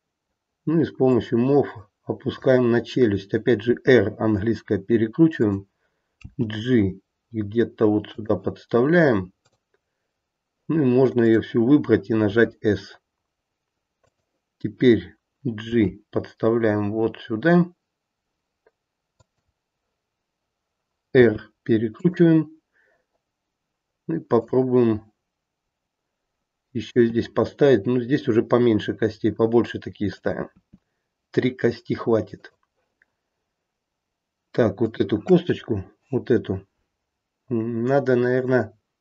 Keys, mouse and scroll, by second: 1.0 click, 3.6 r, 6.2 g, 9.4 click, 11.2 click, 12.2 s, 15.6 g, 21.1 r, 24.3 click, 27.0 e, 30.6 e, 34.8 click.